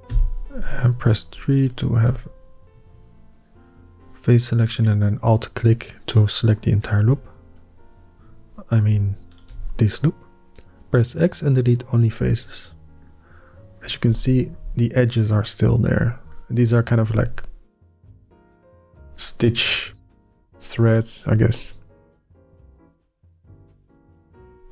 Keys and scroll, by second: 0.9 ", 10.5 x.